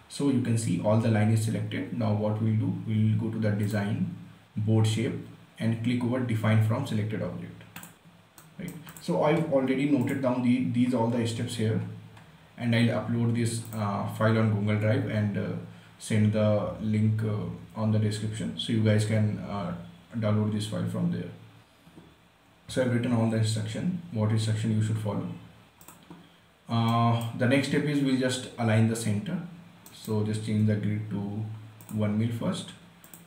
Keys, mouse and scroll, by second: 0.0 Tab, 0.4 scroll down 1, 4.9 click, 8.1 click, 8.8 right click, 9.2 click, 11.1 scroll up 1, 14.0 click, 16.3 scroll down 1, 23.5 scroll down 1, 26.1 click, 27.2-30.0 right drag, 30.2 right click, 30.9 g, 32.1 click.